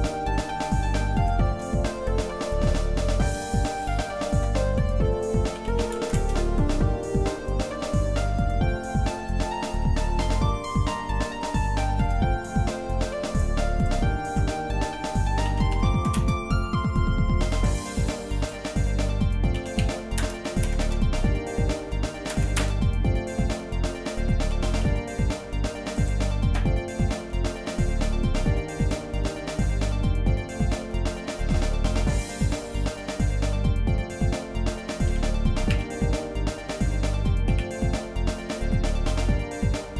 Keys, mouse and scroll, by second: 0.6 middle click, 1.2 shift+middle click, 3.2 click, 3.8 ctrl+right click, 5.5 s, 9.1 shift+middle click, 9.8 middle click, 11.4 middle click, 11.9 middle click, 12.7 shift+middle click, 13.3 click, 13.8 ctrl+right click, 15.4 s, 17.5 click, 18.1 ctrl+right click, 19.5 s, 24.5 s, 27.1 middle click, 27.9-28.5 scroll up 3, 28.8 click, 29.3-30.8 shift+middle drag, 30.9 shift+middle click, 31.7-33.2 shift+middle drag, 31.7 shift+scroll up 1, 35.2 g.